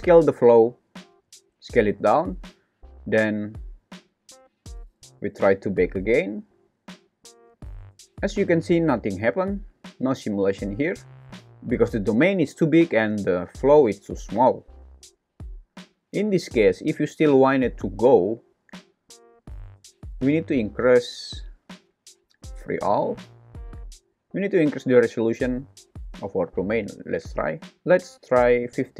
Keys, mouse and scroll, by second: 0.1 s, 3.7 click, 5.5-7.2 drag, 7.5 space, 10.7 space, 19.8 click, 23.0 click, 25.0-27.4 drag, 27.1 KP_0, 28.1 click.